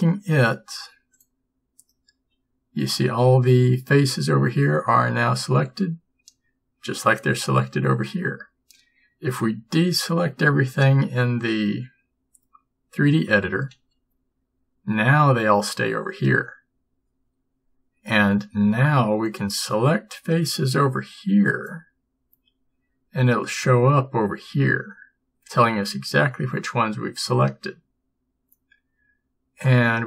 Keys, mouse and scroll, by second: 13.8 a, 21.7 b.